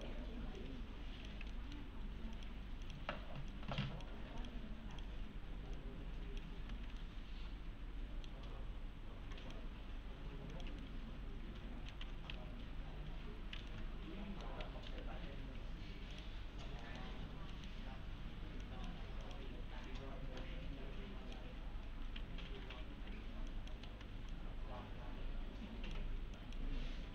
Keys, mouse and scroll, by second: 0.0 ctrl+click, 1.5 alt+middle click, 2.4 click, 4.9 ctrl+click, 6.6 s, 7.0-8.6 alt+middle click, 8.5 scroll up 1, 9.4 click, 10.8-12.1 alt+middle click, 11.8-12.9 typing, 12.7-13.6 scroll down 1, 13.7-14.6 alt+middle click, 14.9 v, 16.1 click, 16.8-17.2 scroll down 2, 16.8 middle click, 17.2 scroll up 1, 17.2 scroll down 1, 17.3 scroll up 1, 17.5 middle click, 17.8-18.6 scroll up 1, 18.6 click, 20.2-23.9 typing, 23.5 click, 24.3-26.2 click.